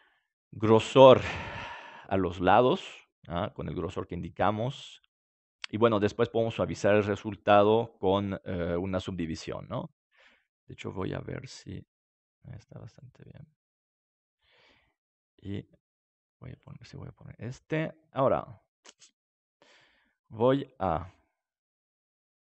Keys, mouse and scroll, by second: 0.2-1.2 middle drag, 10.9-22.5 drag.